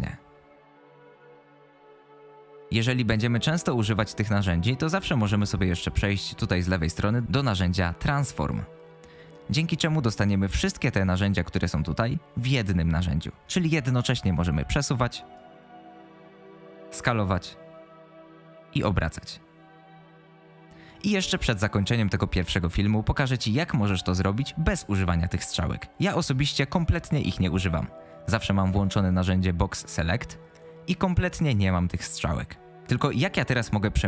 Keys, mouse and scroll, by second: 8.4 click, 14.4-15.4 drag, 16.1 click, 17.3 click, 19.0-20.9 drag, 28.9 click.